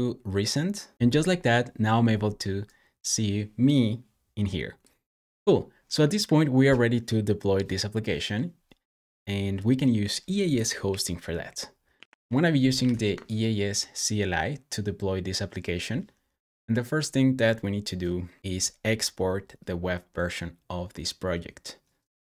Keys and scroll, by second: 9.3 typing, 11.8 ctrl+c, 12.4-13.2 typing.